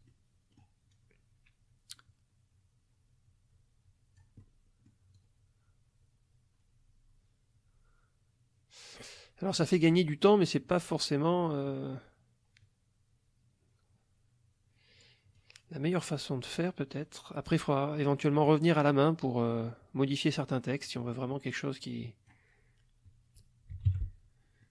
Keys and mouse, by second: 0.0 middle click, 0.9-4.4 drag, 4.4 middle click, 5.2-15.2 drag, 15.4-22.5 drag, 23.7 F1, 23.9 KP_Subtract, 24.6 middle click.